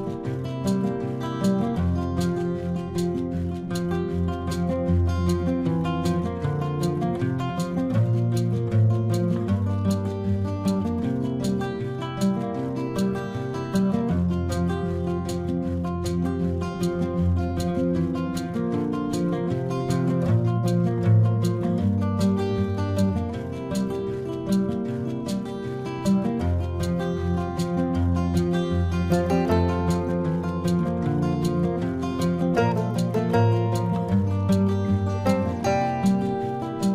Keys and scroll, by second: 0.8 space, 3.2 space, 3.9 space, 4.2 ctrl+=, 4.4 ctrl+=, 4.8 ctrl+-, 14.0 ctrl+alt+z, 14.2 ctrl+-, 15.8 ctrl+-, 15.9 space, 21.5 ctrl+-, 22.0 ctrl+-, 22.3 ctrl+-, 23.2 ], 26.1 space, 27.0 space, 29.9 space, 32.3 space, 34.6 space, 34.9 space.